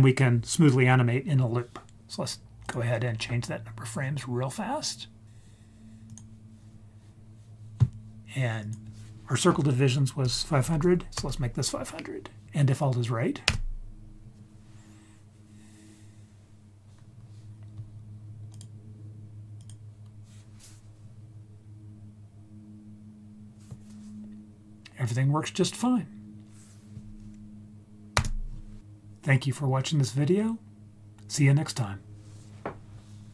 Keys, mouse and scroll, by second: 2.6-6.2 drag, 8.6-11.3 drag, 10.8 0, 13.4 space, 18.5-19.7 drag, 28.1 space.